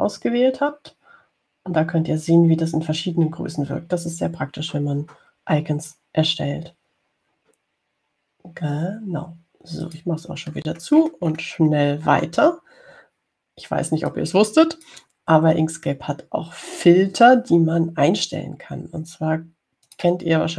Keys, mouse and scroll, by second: 11.1 click, 11.8-13.8 scroll down 10, 15.3-16.7 drag, 16.7-17.3 scroll down 4.